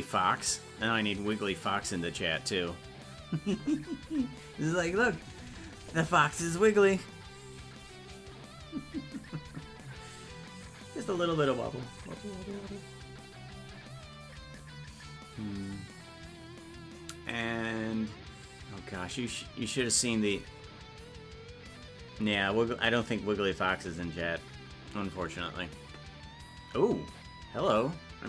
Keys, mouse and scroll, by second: 17.5 right click.